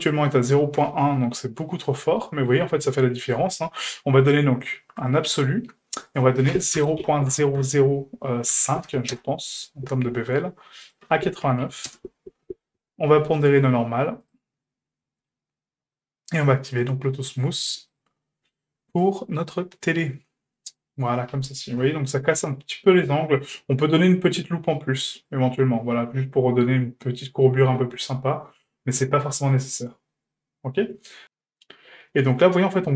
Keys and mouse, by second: 0.5 shift+middle click, 1.0-2.0 ctrl+middle drag, 2.2 shift+middle click, 4.2-5.1 drag, 6.1-10.0 drag, 7.6 KP_0, 10.8-12.4 drag, 13.3-14.4 drag, 17.9 click, 18.9 click, 20.3 click, 21.8 Tab, 22.5 Tab, 25.2 click, 28.1-28.7 middle drag, 29.5-30.1 middle drag, 30.3-32.9 middle drag.